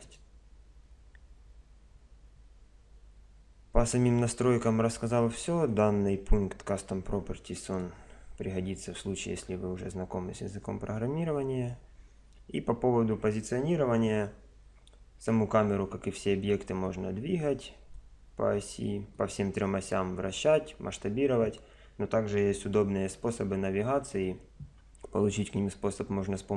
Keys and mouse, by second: 0.1-1.9 right drag, 5.7 click, 7.7 click, 14.6 KP_0, 16.9 click, 19.2 click, 23.1 KP_0.